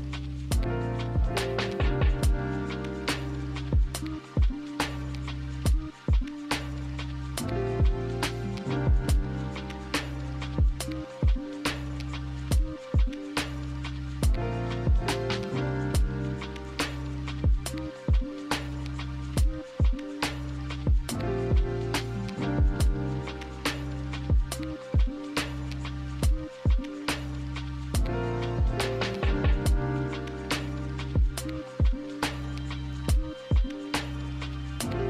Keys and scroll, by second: 4.4 z, 12.8 k, 33.2 b, 34.1 a.